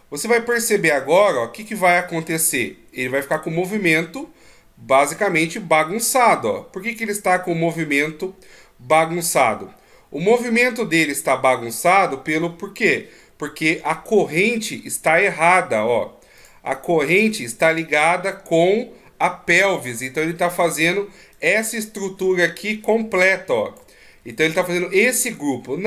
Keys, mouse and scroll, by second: 1.0 right click, 2.5 KP_1, 3.8-5.4 ctrl+scroll up 10, 5.4 g, 11.2 scroll down 3, 12.0 middle click, 12.6 g, 17.3 right click, 21.7 click, 24.1 d, 24.7 right click.